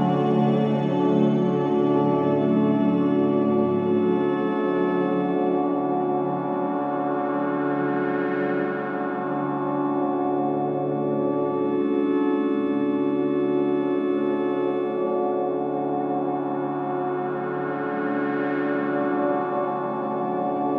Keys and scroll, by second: 3.4 F1, 3.8 F2, 15.6 ,, 18.6 ,, 20.6 ctrl+z.